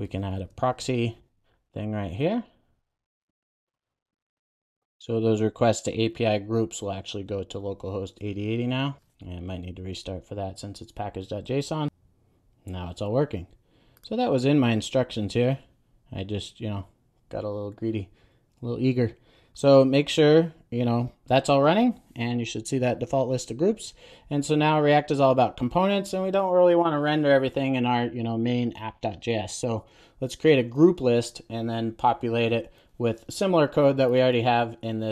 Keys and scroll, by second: 8.5 super+s.